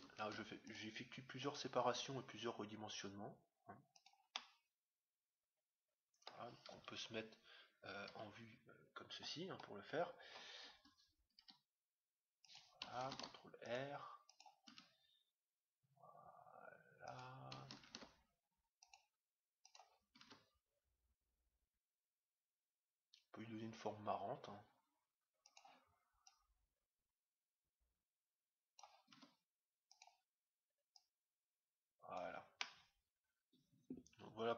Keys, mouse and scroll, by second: 0.2 ctrl+r, 1.9 s, 4.3-6.0 middle drag, 6.7 KP_1, 8.0 KP_3, 9.5-9.9 scroll up 1, 9.9-12.2 middle drag, 11.3 s, 13.1 ctrl+r, 14.6 s, 17.8 ctrl+r, 20.2 s, 26.3-27.9 drag, 29.1 s, 30.9-32.6 drag, 32.6-34.3 middle drag.